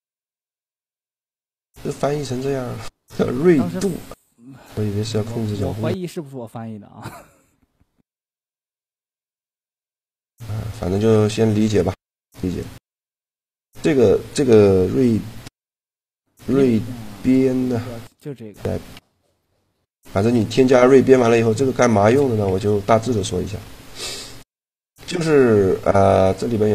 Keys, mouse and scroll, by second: 2.2 g, 6.4 t, 9.9-11.7 middle drag, 13.4 right click, 15.9 ctrl+e, 19.1 ctrl+e, 22.2 Tab, 24.7-26.6 drag.